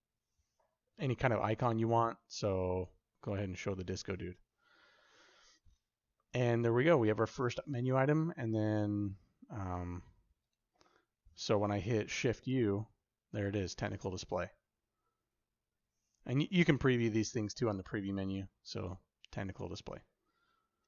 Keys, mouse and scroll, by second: 10.2 click, 12.0 shift+u, 20.7 click.